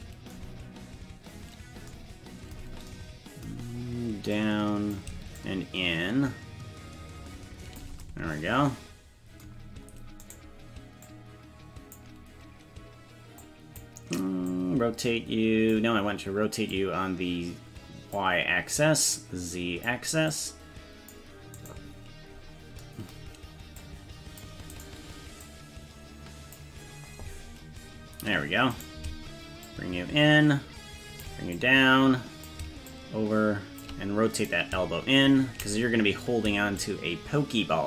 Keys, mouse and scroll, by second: 4.4 click, 5.4-7.9 shift+drag, 10.3 right click, 11.1-12.1 drag, 13.4 click, 14.5-15.8 drag, 16.8-18.2 drag, 19.2 click, 20.3 click, 21.7 right click, 22.0-22.8 scroll down 4, 23.8 click, 24.8 right click, 25.5-26.7 drag, 28.8 right click, 29.7-31.4 shift+drag, 31.6 click, 32.9 shift+click, 34.4 right click, 36.8-37.8 shift+drag.